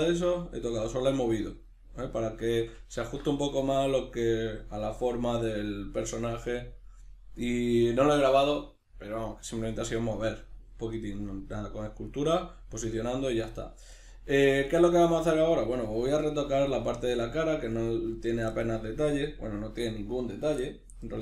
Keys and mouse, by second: 3.0 alt+q.